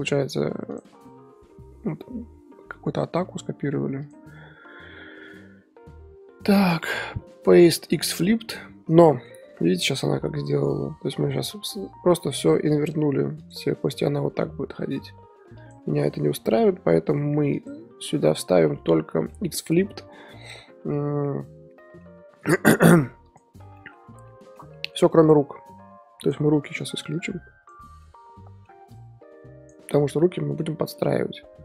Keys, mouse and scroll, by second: 0.7 click, 6.6-11.5 right drag, 9.1-11.5 middle drag, 11.5 i, 13.4-18.6 drag, 18.6-23.2 shift+middle drag, 22.1-25.2 drag, 23.7 middle drag, 24.0 scroll up 2, 24.2-25.2 middle drag, 27.1 ctrl+click, 28.0-28.9 middle drag, 28.2 ctrl+click, 28.9 ctrl+click, 30.1-30.6 middle drag, 30.6 z, 31.0-31.6 middle drag.